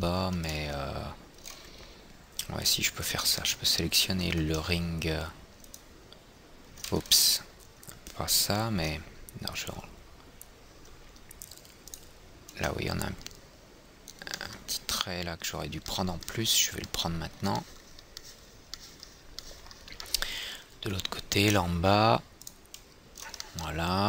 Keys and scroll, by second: 7.5 ctrl+z.